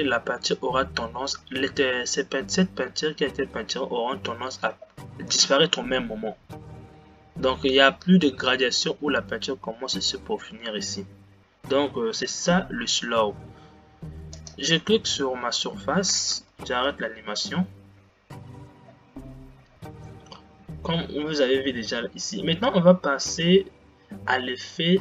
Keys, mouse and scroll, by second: 15.4 click, 17.3 space, 18.9-20.2 scroll down 8, 20.2 scroll down 5.